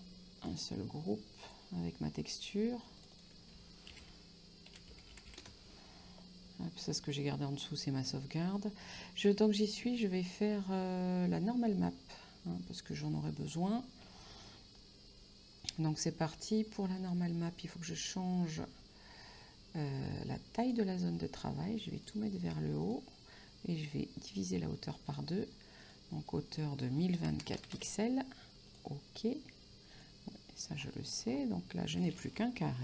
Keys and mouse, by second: 0.0 click, 3.4 click, 4.3 e, 4.9 x, 5.3 r, 5.7 Return, 17.4 click, 20.8 click, 22.0 click, 25.1 click, 27.3 KP_1, 27.9 KP_4, 28.9 click.